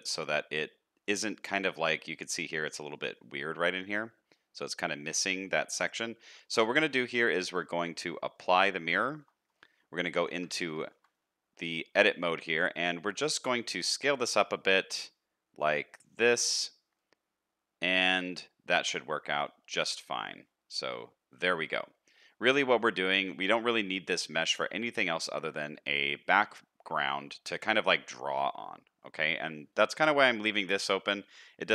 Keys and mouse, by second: 0.5 middle click, 1.6 shift+middle click, 3.0 middle click, 4.8 middle click, 6.5 middle click, 9.1 shift+middle click, 10.1 Tab, 10.5 shift+middle click, 10.9 a, 11.1 middle click, 12.0 shift+middle click, 12.7 s, 16.7-19.5 middle drag, 19.8 Tab, 20.4-21.6 middle drag, 22.4 middle click, 23.3 middle click, 24.4-25.3 middle drag, 25.8 middle click, 28.8 middle click, 30.1 middle click.